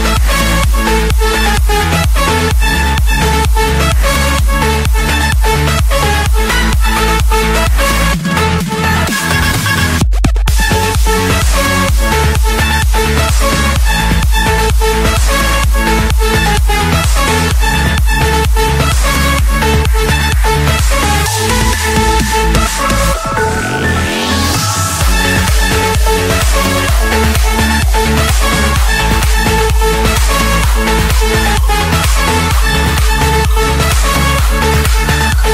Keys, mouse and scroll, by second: 15.9-17.1 drag, 17.7-18.3 scroll, 19.4 scroll, 20.8 Escape, 22.1 typing, 23.7 typing, 24.8 Return, 26.7 click, 27.4 click, 28.2 Return, 29.7 Escape, 30.8 click, 31.7 click, 31.9 middle click, 32.0 middle click, 32.7 middle click, 33.4 click.